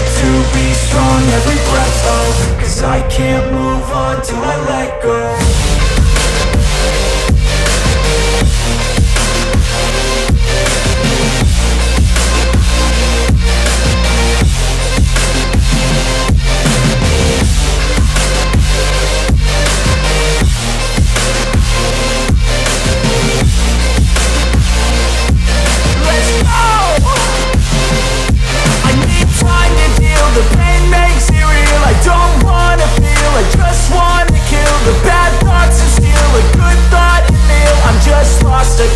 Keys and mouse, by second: 7.0 shift+d, 8.2 s, 9.3 middle click, 9.9-13.7 drag, 13.2 s, 13.7-15.1 middle drag, 15.1-18.5 drag, 17.5 s, 18.5-29.3 middle drag, 25.5 shift+a, 29.3-38.9 drag.